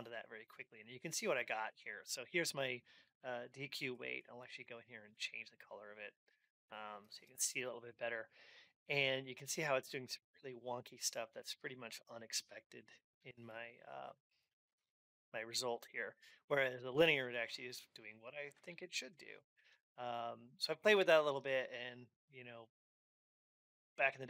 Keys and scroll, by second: 0.6 alt+x, 18.4 ctrl+Up.